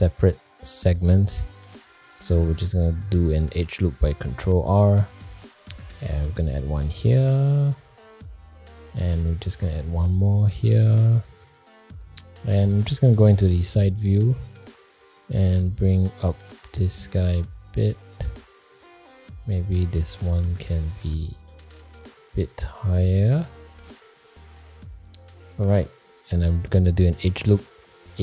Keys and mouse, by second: 2.3 middle click, 4.9 ctrl+r, 9.4 ctrl+r, 12.5 alt+middle click, 12.9 alt+middle click, 14.2 click, 15.4 g, 19.0 click, 21.3 g.